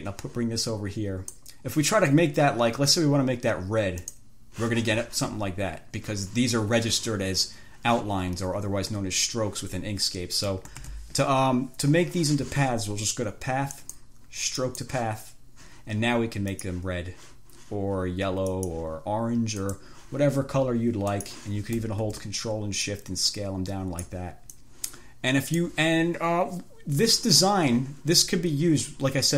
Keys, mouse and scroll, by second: 0.2-1.8 drag, 4.2 click, 11.1 ctrl+z, 14.0 click, 14.9 click, 16.8 click, 18.8 click, 19.9 click, 21.4 click, 23.2-24.6 ctrl+shift+drag, 24.9-26.1 drag.